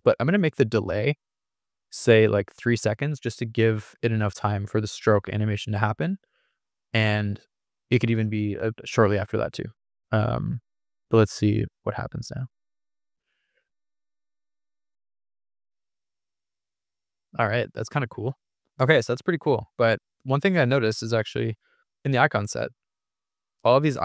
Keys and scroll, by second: 0.6 6, 0.9 Return, 4.4 3, 5.4 Return.